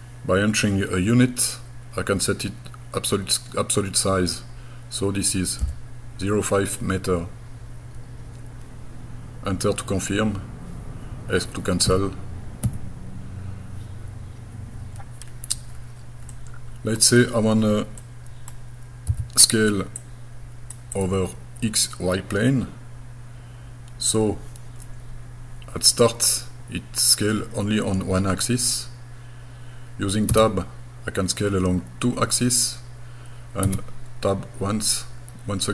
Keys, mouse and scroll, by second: 5.6 m, 11.9 Escape, 12.6 Escape, 15.3-15.7 scroll down 2, 15.7-16.0 scroll up 3, 16.0 scroll down 1, 16.3 middle click, 17.3 scroll down 1, 18.0 middle click, 19.1 s, 20.0 click, 21.0 click, 30.3 Tab, 33.7 Tab.